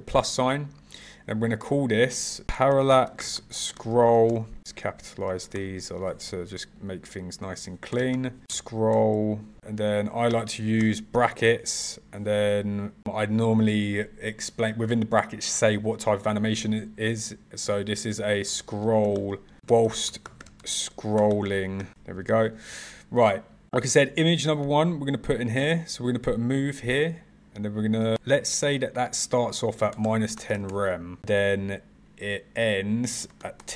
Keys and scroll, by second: 5.1 s, 8.2 p, 8.5 Left, 18.0 BackSpace, 18.4 s, 19.6 w, 20.5 s.